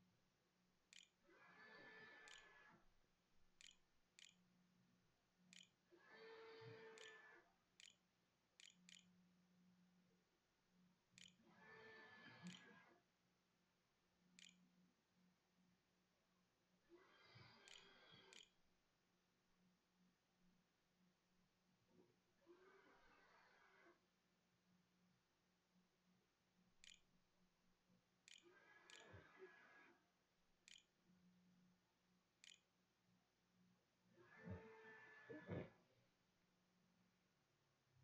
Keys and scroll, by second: 0.0-10.4 typing, 0.5 Tab, 5.1 Tab, 11.0 Tab, 12.5-14.7 typing, 17.2-19.8 typing, 24.2-29.2 typing, 30.1 Tab, 31.0-32.2 typing, 32.8 Delete, 36.9 ].